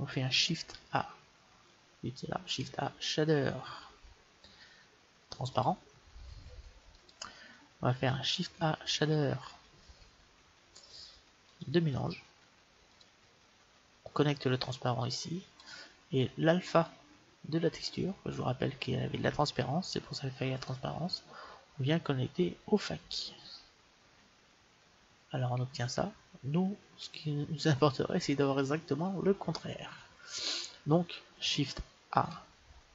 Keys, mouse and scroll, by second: 0.7 shift+a, 1.1 shift+a, 2.5 shift+a, 8.4 shift+a, 12.9-16.5 drag, 17.8-19.4 drag, 32.3 shift+a.